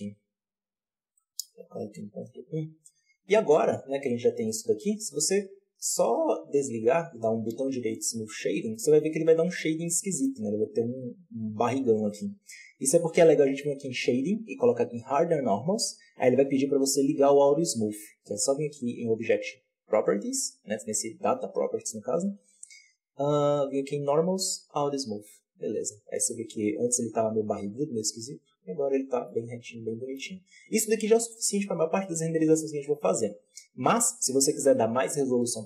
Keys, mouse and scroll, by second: 3.1 scroll down 1, 3.3 Tab, 3.8 Tab, 4.9-6.8 drag, 6.8 right click, 7.8 w, 9.5-12.8 middle drag, 12.8-29.2 drag, 29.2-30.3 middle drag, 30.3-31.4 scroll up 1, 31.4 scroll down 1, 32.6-32.9 scroll down 2, 32.9-34.2 scroll up 4.